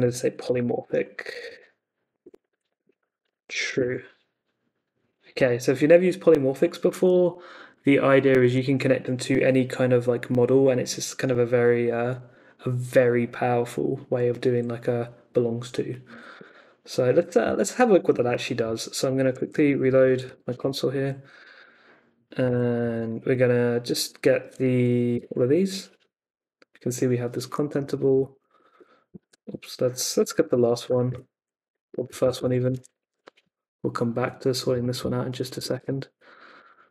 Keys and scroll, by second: 0.0-3.8 typing, 7.1 super+Tab, 16.3 super+Tab, 18.9-20.7 typing, 22.8 Up, 25.1 Return, 28.1 ., 29.1 ctrl+c, 29.4 Up, 29.9-33.5 typing, 31.6 Up, 35.5 Return, 36.5 Up.